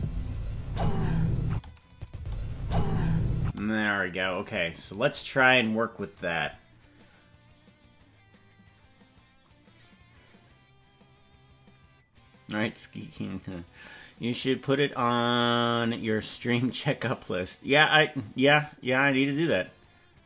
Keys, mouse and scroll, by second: 1.5 space, 1.9 click, 2.1 space, 3.4 space, 4.9-6.9 right drag.